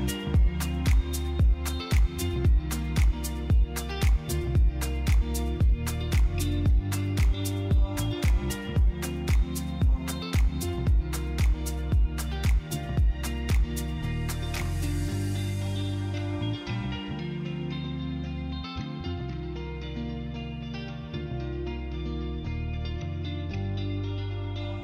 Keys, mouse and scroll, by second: 3.3 click, 4.8 click, 12.4 click, 13.6 click, 15.6 shift+z, 19.2 click, 24.5 click.